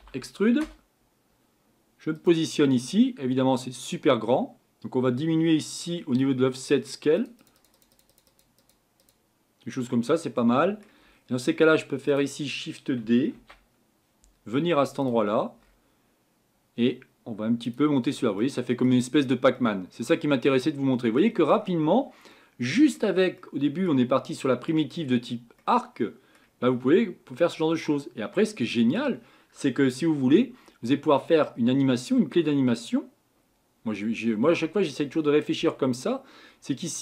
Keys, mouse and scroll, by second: 7.2-13.4 drag, 13.4 shift+d, 17.7 click, 18.4 middle click, 19.1-19.7 scroll down 4, 19.7-27.7 middle drag, 27.7 scroll down 2, 36.6 scroll down 1.